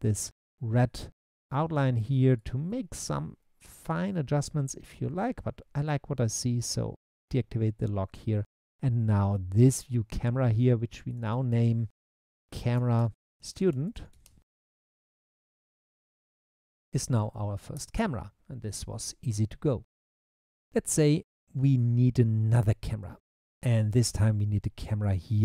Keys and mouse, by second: 6.6 click, 11.1 click, 11.5-17.8 drag, 16.8 shift+Left, 21.8 click, 24.8 q.